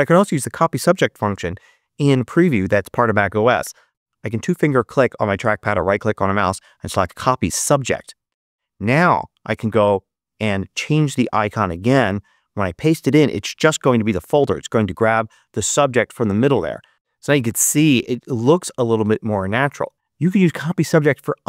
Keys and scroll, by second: 9.9 super+i, 12.1 super+v.